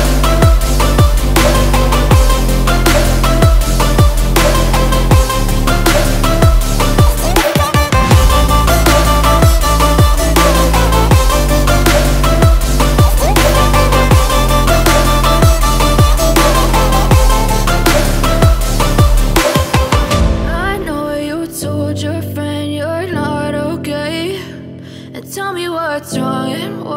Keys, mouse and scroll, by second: 0.3-2.1 drag, 3.0-6.0 drag, 9.7-12.5 drag, 13.3 click, 14.6 g, 17.7-18.3 scroll down 3, 18.3 s, 20.8-23.0 scroll up 3, 23.0-24.0 scroll up 1, 24.5 ctrl+a.